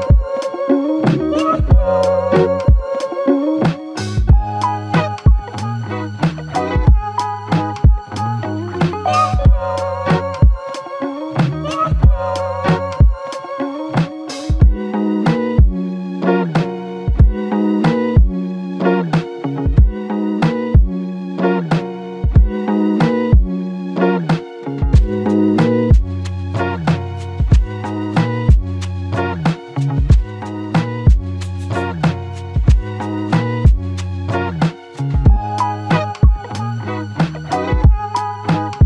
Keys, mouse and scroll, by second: 1.3 alt+shift+click, 7.0 typing, 7.5 Return, 21.1 Return, 21.1-21.8 scroll down 1, 21.8 scroll up 1, 22.4-24.6 scroll down 1, 26.7 f, 28.4 ctrl+alt+click, 37.0 double click.